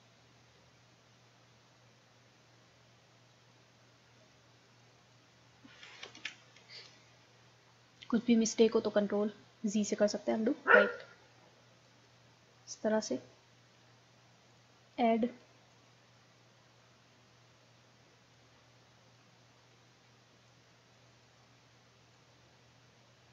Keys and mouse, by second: 4.7-6.5 drag, 6.2 ctrl+z, 7.0-8.5 drag, 9.6-11.1 middle drag, 11.9-13.5 middle drag, 13.5 click, 14.5-17.8 drag, 17.8-18.9 middle drag, 20.5-23.3 drag.